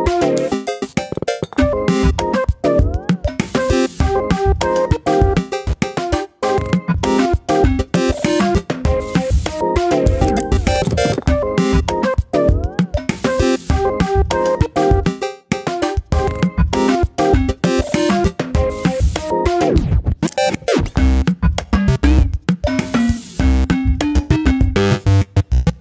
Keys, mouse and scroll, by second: 0.6-1.0 scroll down 1, 1.0 a, 1.7 click, 2.1 click, 3.5 l, 4.0 s, 5.0 KP_1, 5.2-5.6 scroll up 4, 5.6 r, 6.3-6.7 scroll up 1, 6.7 s, 7.3-7.6 scroll up 2, 7.6 click, 8.4 s, 9.1-9.5 scroll up 1, 9.5 f, 9.7-10.1 scroll up 1, 10.1 middle click, 10.8 click, 11.8 e, 13.3 s, 14.5 KP_1, 14.9 click, 15.6-16.0 scroll down 1, 16.0 Tab, 16.1 click, 16.5 Tab, 16.8 click, 17.2 alt+/, 17.5 shift+middle click, 17.8 click, 18.3 click, 20.2 ctrl+z, 20.5-22.0 drag, 22.4 click, 23.7 click, 24.8 click, 25.0 click, 25.5 ctrl+z.